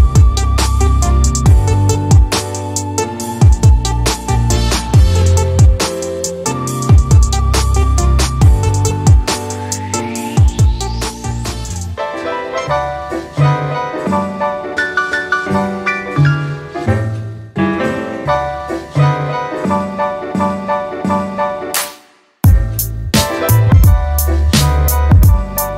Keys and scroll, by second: 1.3-2.7 typing, 7.7-8.5 typing, 14.7-16.2 typing.